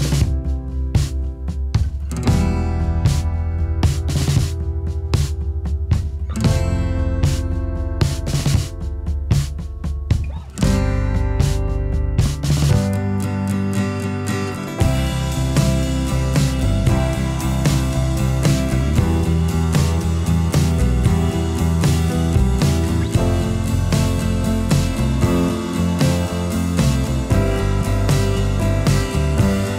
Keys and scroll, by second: 23.2 ctrl+u.